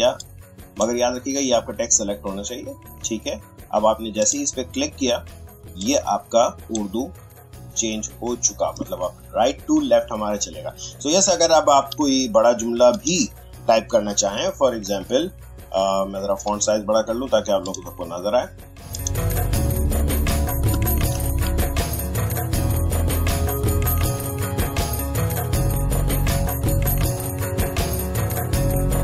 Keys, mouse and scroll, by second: 4.2-9.4 drag, 11.8 t, 12.9 click, 17.6 click, 21.1 m, 22.4-29.0 typing.